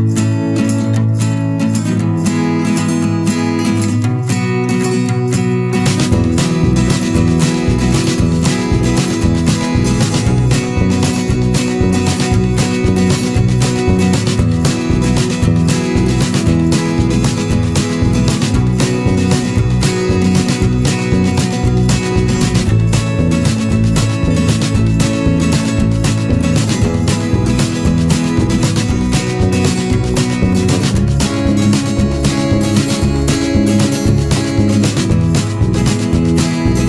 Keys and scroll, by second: 5.6 ctrl+z, 14.5 ctrl+t, 17.1 Return, 22.8 ctrl+=.